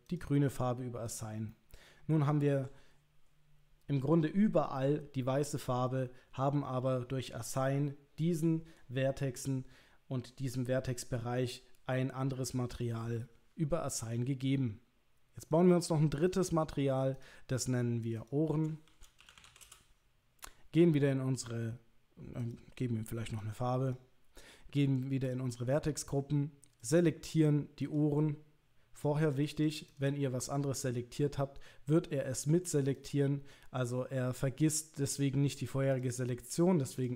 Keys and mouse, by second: 0.1 click, 1.1 click, 1.5-2.7 middle drag, 16.3 click, 17.2 click, 18.0 click, 18.2-20.3 drag, 22.5 click, 25.3 click, 26.8 click, 27.8 click, 29.0 click, 29.2 click, 29.6 click, 29.9 click, 30.9 click, 32.9 click, 36.0 click.